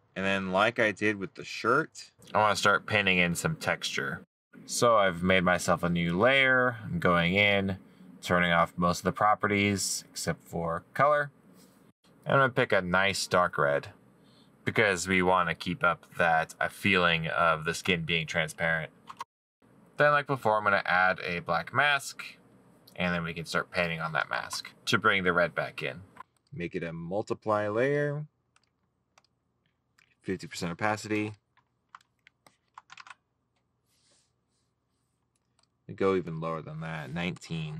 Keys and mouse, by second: 25.1 middle click, 33.8 middle click.